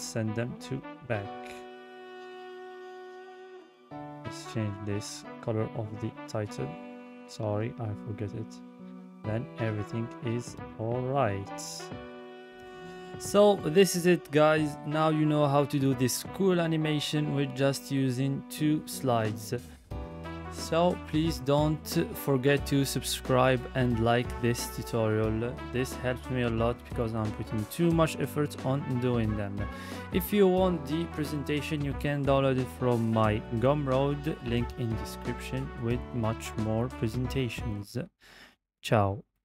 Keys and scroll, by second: 14.2 Left, 16.1 Right, 18.4 Left, 20.1 Right, 23.9 Right, 26.3 Left, 28.0 Right, 31.6 Right, 33.7 Left, 37.4 Left, 38.5 Left.